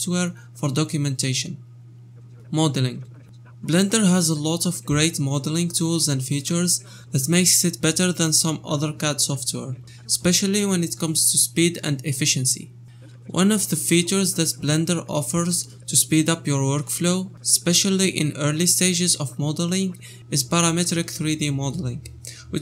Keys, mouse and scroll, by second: 3.4 KP_0, 21.1 shift+r, 22.0-22.3 scroll down 2.